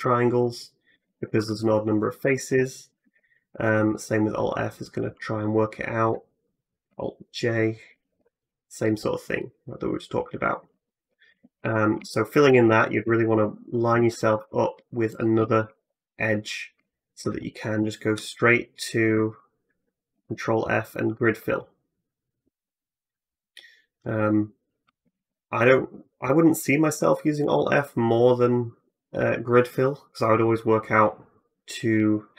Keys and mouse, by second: 0.9 ctrl+z, 1.1 ctrl+z, 1.1-18.9 ctrl+drag, 1.3 ctrl+z, 2.7 alt+f, 7.7 alt+j, 11.4 ctrl+z, 11.8 ctrl+z, 14.2 ctrl+r, 16.8 alt+middle click, 16.8 alt+right click, 20.0 ctrl+f, 25.0 ctrl+z, 27.2 alt+f, 29.0 ctrl+z, 30.3-32.3 drag.